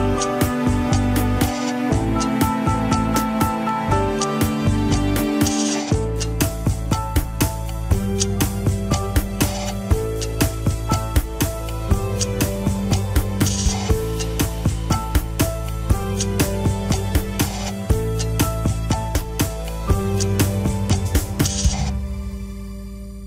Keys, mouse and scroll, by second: 2.8 shift+d, 4.5 middle click, 5.3 g, 5.6 KP_1, 6.0 alt+z, 6.3 g, 7.0-9.0 middle drag, 9.5 scroll up 1, 10.3 scroll down 2, 10.5 ctrl+Tab, 11.7 shift+h, 11.8 scroll up 2, 12.0-12.3 middle drag, 12.3 drag, 12.6 shift+click, 14.0 scroll down 1, 15.0 click, 15.3-16.7 drag, 16.7-18.2 right drag, 18.2 click, 19.5 shift+click, 19.8-21.5 middle drag, 21.5 Tab, 21.9 click, 22.3 shift+s, 22.7 alt+z, 22.9 KP_1.